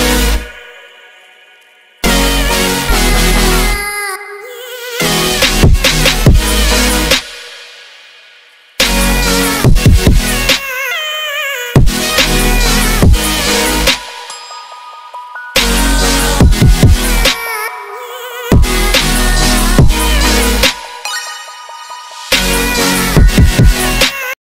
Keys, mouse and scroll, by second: 0.7-1.9 middle drag, 1.9 click, 2.5 ctrl+middle click, 3.1 click, 3.5 click, 4.4-5.1 middle drag, 5.1 click, 5.8-6.9 ctrl+middle drag, 6.9 click, 7.9-8.5 drag, 9.3 click, 9.7 click, 10.5-11.5 middle drag, 11.5 shift+d, 12.8 shift+d, 13.7 shift+d, 14.7 middle click, 15.2 click, 15.6-17.1 ctrl+middle drag, 17.1 click, 17.4 click, 17.5 Tab, 18.0 click, 18.9 ctrl+z, 19.1 middle click, 19.7 click, 19.9 click, 20.3 s, 22.0-22.5 middle drag, 22.5 click, 22.7 click, 23.0 s, 23.7-24.3 ctrl+middle drag, 24.3 click.